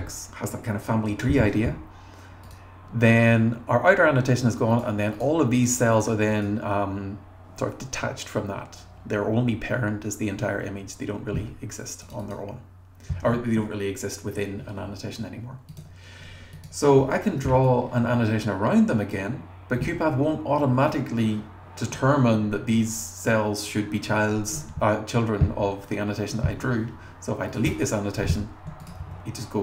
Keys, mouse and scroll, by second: 2.5 click, 4.7 click, 5.1 click, 5.6 click, 5.9 click, 6.3 click, 12.0 click, 12.2 click, 15.7 click, 16.5 click, 17.0 r, 17.7-19.3 drag, 24.8 scroll down 1, 27.5 click, 27.6 BackSpace, 28.8 click, 29.0 r.